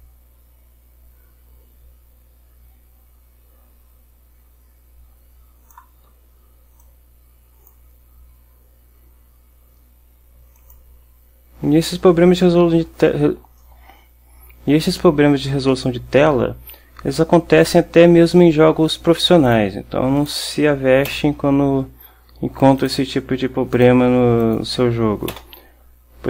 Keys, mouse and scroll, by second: 6.9 click, 10.7 click, 19.6 click, 20.3 click, 21.2 Delete, 22.9 click, 24.5 click, 25.4 Delete.